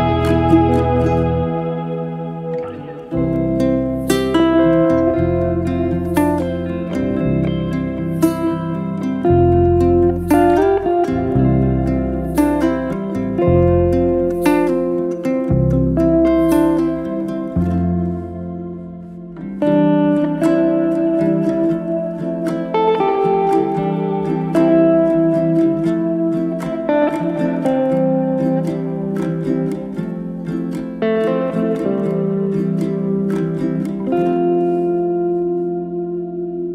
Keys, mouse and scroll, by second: 2.1 click, 2.8-4.7 drag, 6.2-7.7 drag, 8.4 click, 8.8-10.1 right drag, 10.1 click, 10.5 drag, 11.0 click, 12.8 drag, 13.2-13.8 drag, 14.3 click, 21.5 click, 22.2-23.7 drag, 23.8 click, 24.6-26.1 drag, 31.2 click, 32.8 click.